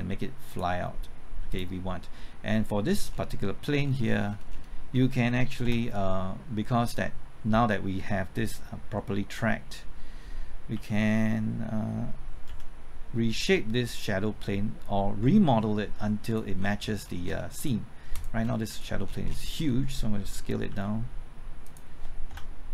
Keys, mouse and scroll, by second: 1.5 click, 2.8-3.4 scroll down 1, 3.4 middle click, 4.0 scroll down 1, 4.9 scroll up 1, 5.6 KP_0, 6.7 scroll up 1, 10.7 g, 12.4 x, 16.2 right click, 16.5-17.3 scroll down 1, 17.5 right click, 18.1 click, 18.4 scroll down 1, 18.6 middle click, 19.2-19.5 scroll down 1, 19.9-20.7 scroll up 1, 20.7 typing, 20.7-21.6 scroll up 1, 21.6 click, 22.3 KP_0.